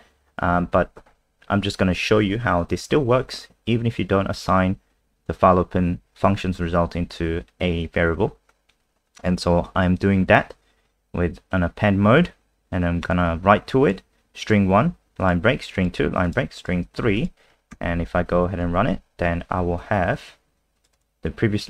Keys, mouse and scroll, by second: 1.1-1.9 scroll up 1, 13.1 click, 16.6 click, 17.2 click, 17.7 ctrl+s, 18.6 F5, 20.8 click, 20.9 click.